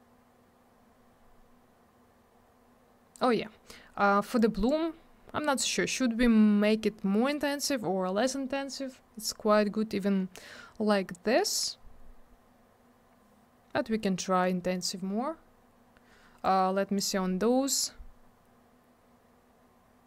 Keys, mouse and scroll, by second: 4.4 click, 15.1 scroll down 1, 16.4 click.